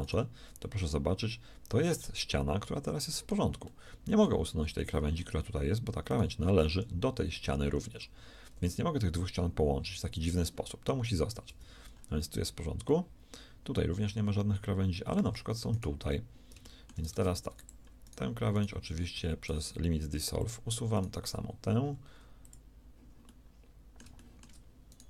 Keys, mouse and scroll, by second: 6.6 g, 10.7 middle click, 11.4 z, 17.0 ctrl+Tab, 19.0 x, 20.4 click, 21.4-23.2 right drag, 21.8 x.